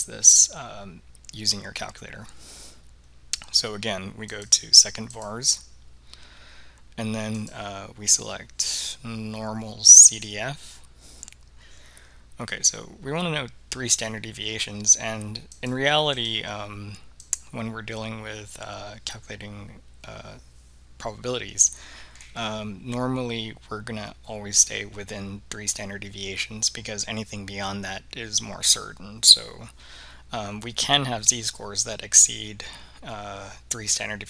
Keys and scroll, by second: 7.5 Down, 10.2 Return, 16.2 3, 17.4 Return.